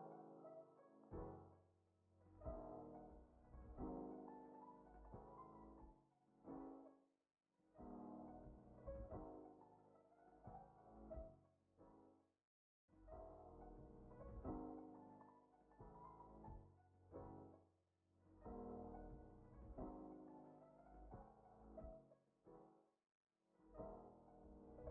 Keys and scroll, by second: 2.8 Down, 9.8 alt+[, 10.1 ctrl+s, 12.5 z, 16.4 Up, 21.7 Down, 24.6 ctrl+k.